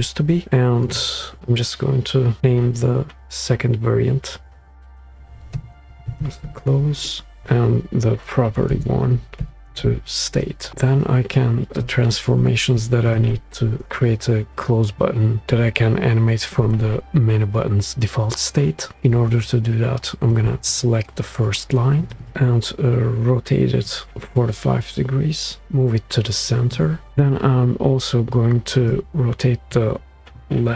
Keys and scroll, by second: 5.6-7.2 typing, 7.2 Return, 8.7-10.7 typing.